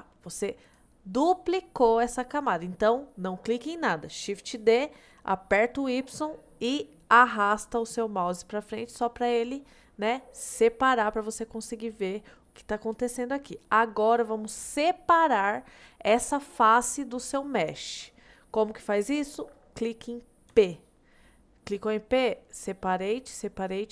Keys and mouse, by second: 0.7 click, 20.5 p.